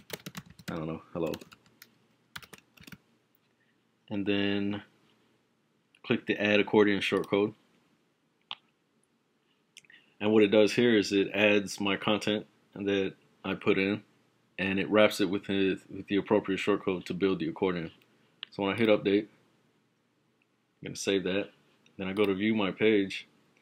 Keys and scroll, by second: 0.0-2.8 typing.